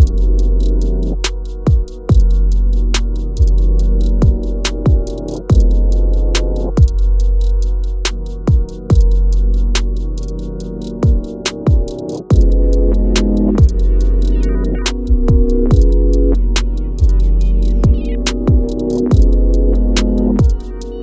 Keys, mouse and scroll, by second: 1.5 click, 5.1-5.6 scroll down 1, 7.3 click, 8.7-10.7 typing, 12.3 click, 16.8 click, 19.2 click, 19.3-21.0 shift+drag.